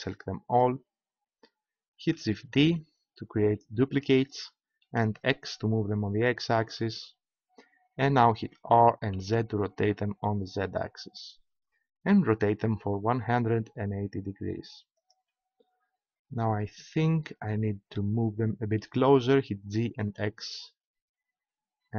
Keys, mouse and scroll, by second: 2.6 shift+d, 6.7-8.5 drag, 8.5 r, 15.0-17.3 drag, 17.4-19.6 middle drag, 19.6 g.